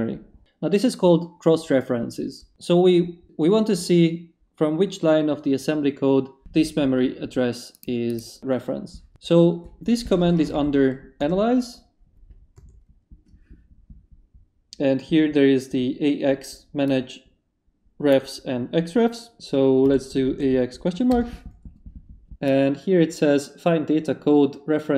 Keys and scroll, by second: 10.2 a, 10.5 shift+/, 11.2 shift+Return, 11.8 Return, 12.5 a, 19.8 x, 20.2 shift+/, 21.1 shift+Return.